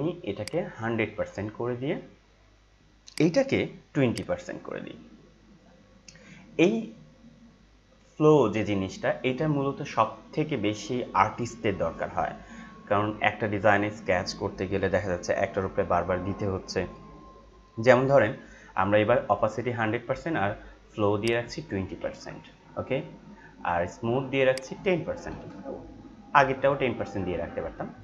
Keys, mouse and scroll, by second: 0.3-21.2 drag, 24.5 click.